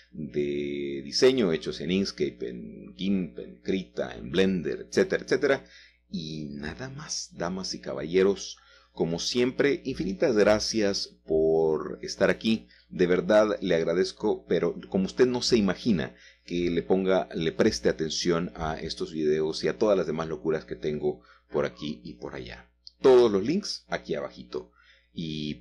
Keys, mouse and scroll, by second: 0.0 h, 1.0-2.8 middle drag, 2.8 click, 4.2 click, 5.5 shift+middle click, 6.5 shift+middle click, 7.1 shift+middle click, 8.0-8.4 scroll up 2, 8.6-9.9 shift+middle drag, 10.0-10.7 scroll down 2, 10.7-12.3 shift+middle drag, 12.9 alt+h, 14.4-15.5 drag, 17.3-18.7 shift+middle drag, 19.3-20.6 shift+middle drag, 21.4-22.9 middle drag, 21.7 scroll down 1, 21.8-22.6 scroll up 1, 23.3 middle click, 24.2 shift+middle click, 24.8 middle click.